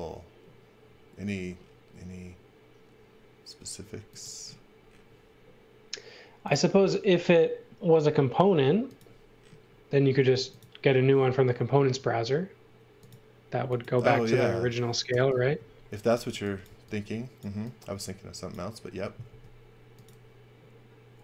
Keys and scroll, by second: 13.5 space, 15.1 Delete, 16.3 x, 16.6 v, 19.2 b.